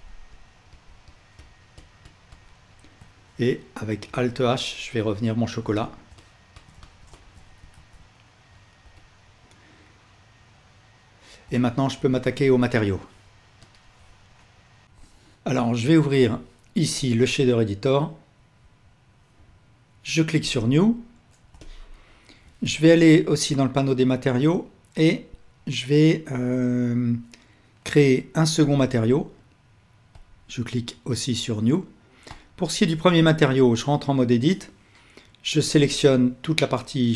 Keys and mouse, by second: 4.8 alt+h, 7.6 ctrl+alt+shift+middle click, 8.4 ctrl+Tab, 13.0 ctrl+s, 21.5-23.8 alt+shift+drag, 28.7-32.5 drag, 33.3 Tab, 35.7 l.